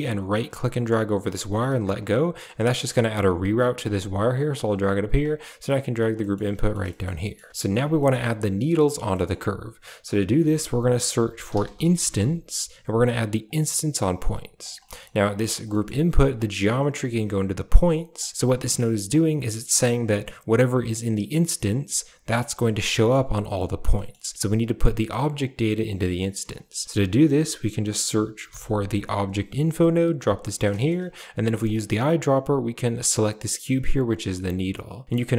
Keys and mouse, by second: 0.2 shift+click, 0.5-1.7 shift+drag, 2.9 g, 3.8 g, 5.1 click, 6.0 middle click, 6.4 middle click, 6.7 shift+middle click, 7.1 middle click, 7.8 middle click, 9.0 middle click, 10.3 shift+a, 14.7 click, 15.2 drag, 15.6 middle click, 16.3-17.6 drag, 18.0 click, 18.5 middle click, 19.0 click, 22.1 middle click, 22.8 middle click, 23.8 shift+middle click, 25.9 middle click, 26.7 shift+a, 30.4 middle click, 31.5 click, 34.7 click.